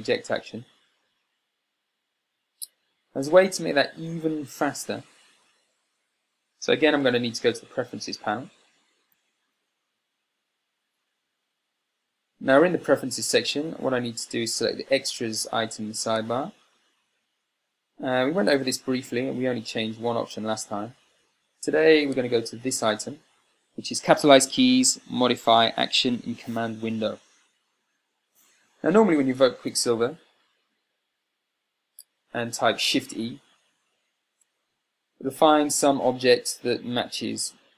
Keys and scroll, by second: 9.8 super+,, 34.2 shift+e.